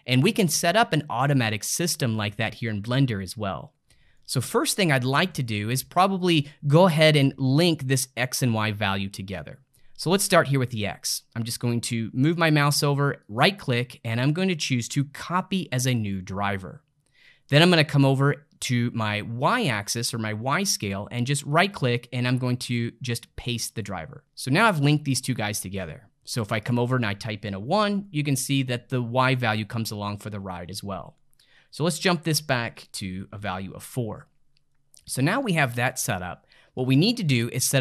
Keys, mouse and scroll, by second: 3.4-8.5 middle drag, 13.2-16.3 right drag, 21.3-24.2 right drag, 26.6-29.7 drag, 32.0-34.7 drag, 34.7-37.8 middle drag.